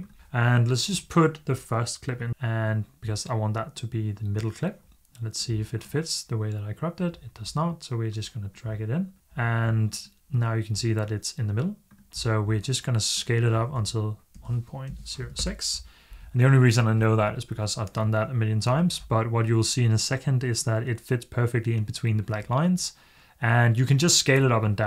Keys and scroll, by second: 13.6-15.0 typing, 15.2 Return.